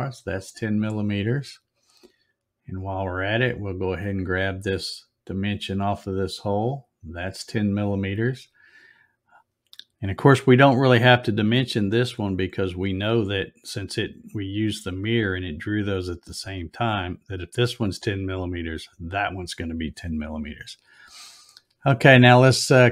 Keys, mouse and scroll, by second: 0.2 click, 3.6 click, 6.3 click.